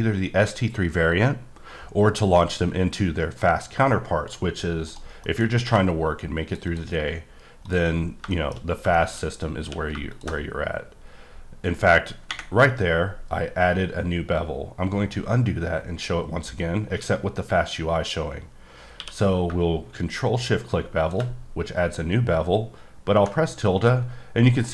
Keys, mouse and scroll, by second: 4.9 right click, 5.2 middle click, 5.7 q, 6.2 click, 6.6 double click, 7.1-7.6 scroll up 5, 7.9 scroll up 1, 8.3 shift+middle click, 8.6-8.9 shift+scroll up 1, 8.9 middle click, 9.3 scroll down 1, 9.6 q, 10.1 shift+click, 21.0 ctrl+click.